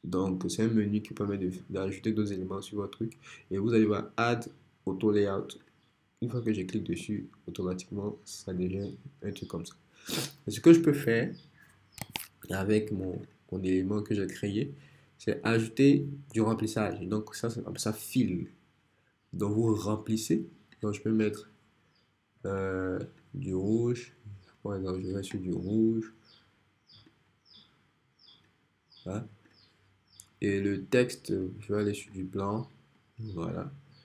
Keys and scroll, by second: 12.0 BackSpace.